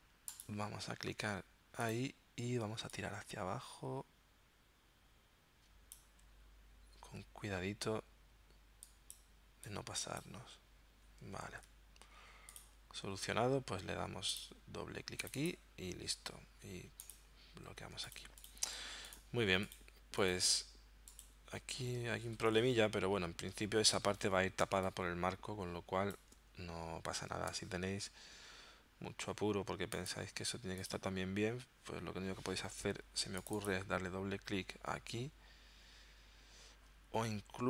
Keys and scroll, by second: 11.5 super+z, 17.8 z, 24.7 space, 27.5 v.